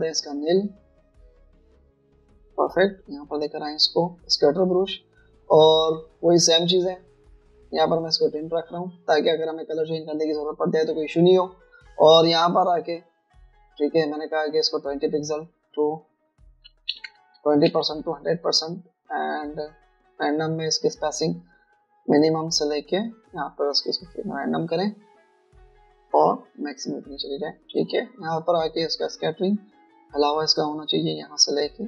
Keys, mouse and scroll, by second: 0.0 typing, 17.7-19.5 typing, 18.7 Tab, 24.8 double click.